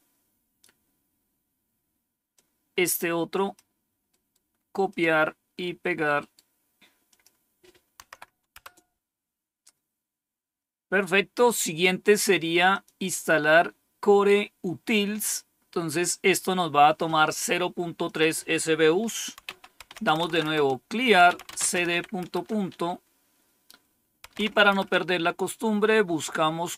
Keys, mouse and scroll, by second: 2.2-3.5 drag, 4.0 right click, 4.8 click, 6.1 right click, 7.0 click, 7.9 Tab, 8.5 Return, 12.6 click, 17.9 click, 19.1-22.3 typing, 23.9-24.7 typing.